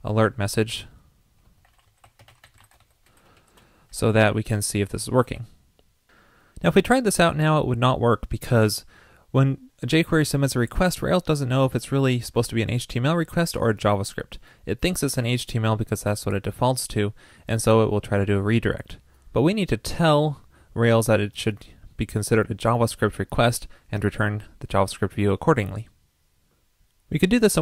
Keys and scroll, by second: 5.2 super+c, 5.3 super+s.